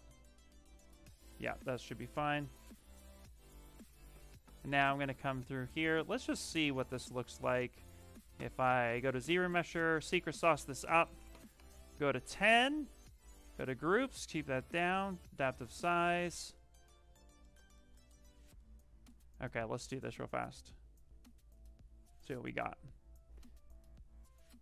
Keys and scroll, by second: 3.0 ctrl+w.